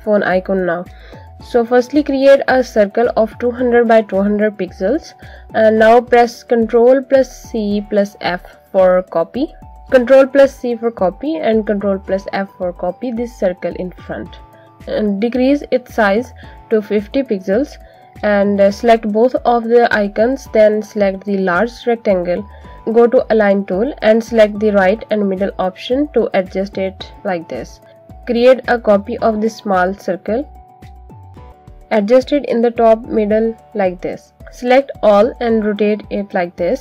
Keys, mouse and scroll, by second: 1.5 right click, 3.2 click, 4.6 alt+shift+click, 6.0 click, 9.4 ctrl+c, 10.7 ctrl+f, 13.8 shift+click, 19.3 click, 23.9 click, 30.5 click, 33.3 click.